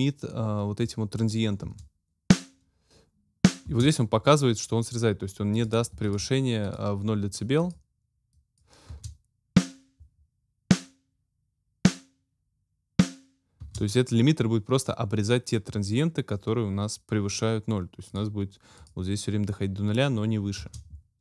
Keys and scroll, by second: 1.6 space, 3.7 space, 8.9 space, 13.6 space, 20.5 space.